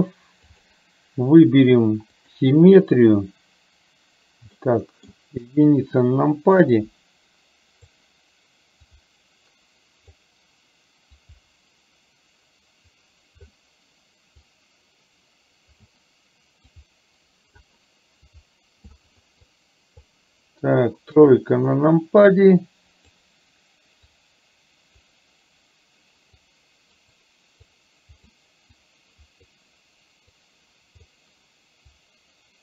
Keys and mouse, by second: 2.2 click, 4.6 middle click, 5.5 KP_1, 6.8-8.0 drag, 9.1-10.2 drag, 11.2-13.6 drag, 14.5-16.0 drag, 16.8 click, 18.3 click, 19.6 click, 21.3 KP_3, 22.2-23.2 drag, 24.1-25.1 drag, 26.5 click, 27.7 click, 28.8 click, 30.3 click, 32.0 click.